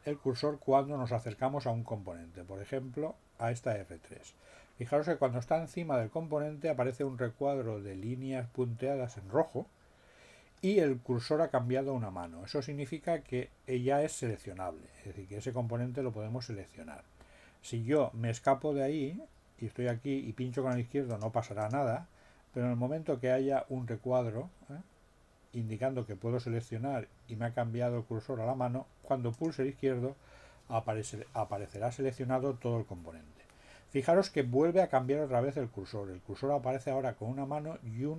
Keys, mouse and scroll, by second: 20.5 click, 21.1 click, 21.6 click, 29.3 click.